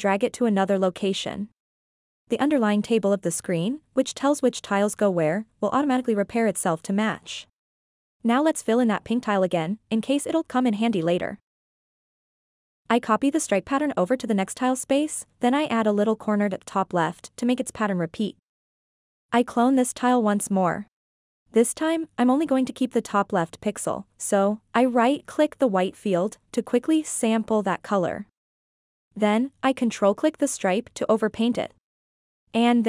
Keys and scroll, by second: 13.8 ctrl+c, 14.8 ctrl+v, 19.7 ctrl+c, 20.8 ctrl+v.